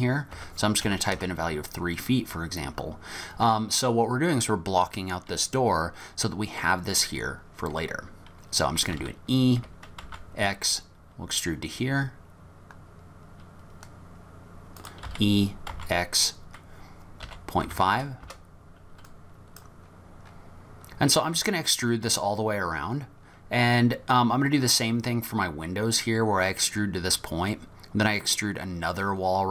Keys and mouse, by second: 9.0 e, 15.1 e, 19.2 click.